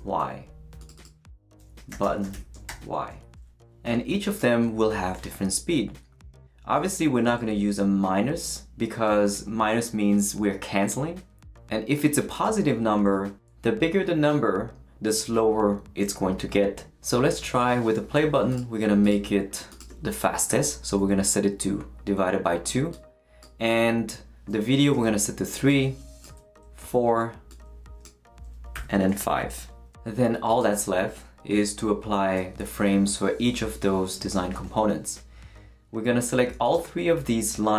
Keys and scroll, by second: 0.0-0.3 typing, 1.5-3.2 typing, 20.5 shift+2, 21.0 2, 24.9 3, 26.3 4, 28.7 5.